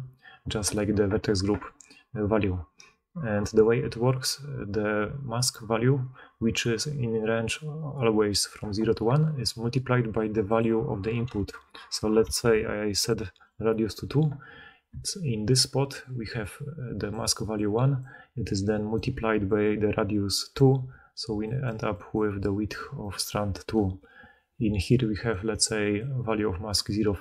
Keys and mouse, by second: 14.8-27.2 typing, 16.2-17.8 right drag, 16.2-17.8 drag, 16.2-17.8 middle drag, 27.1-27.2 drag, 27.1-27.2 middle drag, 27.1-27.2 right drag.